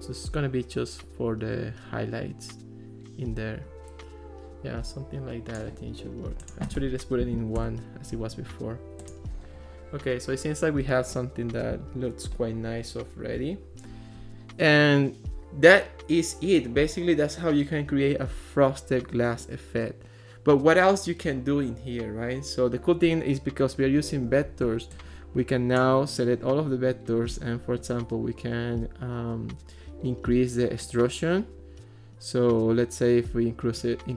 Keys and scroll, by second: 7.3 1, 7.6 Return.